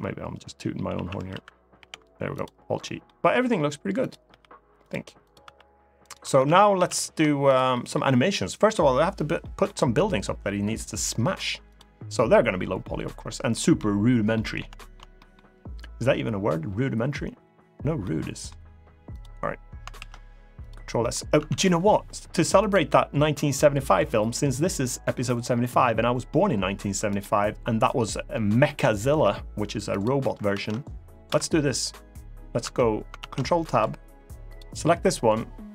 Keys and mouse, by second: 0.7 a, 1.0 alt+r, 1.5 alt+g, 2.1 click, 2.6 middle drag, 4.0 r, 4.5 click, 5.0 click, 5.2 r, 5.7 right click, 6.2 ctrl+z, 6.5 ctrl+z, 7.5 middle click, 9.2 middle drag, 11.4 click, 13.3 middle drag, 14.1 middle drag, 14.5 shift+middle click, 14.9 middle click, 17.8-18.2 middle drag, 19.7 ctrl+s, 20.4 click, 20.8 middle click, 21.1 Tab, 22.4 click, 26.8 click, 29.7 click, 30.2 ctrl+Tab, 32.3 Tab, 32.9 ctrl+Tab, 33.4 click.